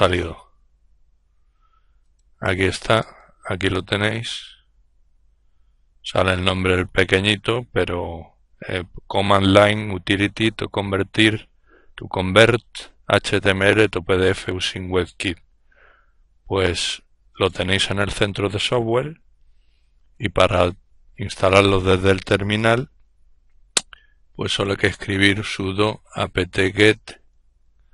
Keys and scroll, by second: 19.7 ctrl+alt+t, 23.8-27.9 typing.